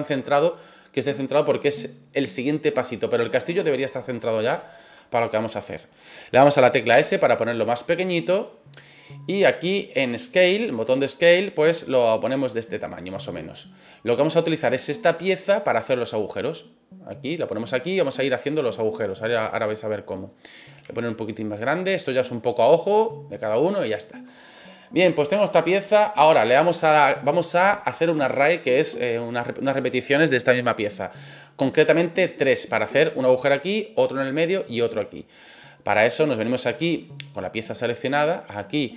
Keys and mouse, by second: 4.6 shift+middle drag, 5.0-5.5 middle drag, 6.9 s, 8.1 click, 8.4 middle drag, 10.6 click, 11.6-13.0 drag, 13.2-13.6 middle drag, 14.3 click, 15.1 click, 16.2-17.6 drag, 17.8-20.3 middle drag, 20.8 s, 21.5 click, 21.9-23.5 middle drag, 23.9 shift+middle drag.